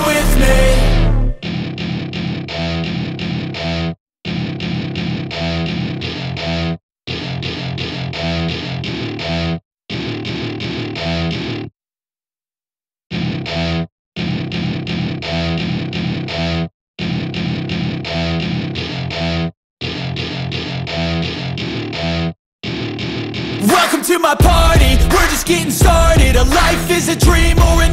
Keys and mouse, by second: 1.1 e, 8.7 e, 13.2 e, 20.2 e.